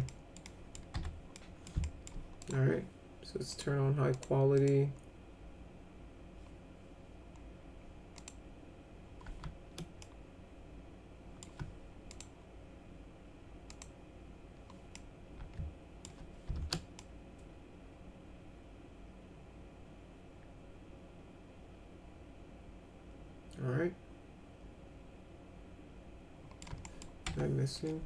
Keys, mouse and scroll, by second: 0.0 middle click, 0.4 middle click, 0.9 F4, 1.4 middle click, 1.8 alt+middle click, 2.4 click, 3.5 click, 4.1 click, 4.5 click, 8.1 click, 10.0-11.4 alt+middle drag, 12.1 click, 13.7 click, 14.9-16.0 middle drag, 17.0-26.6 alt+middle drag, 26.8 middle click, 27.3 F3.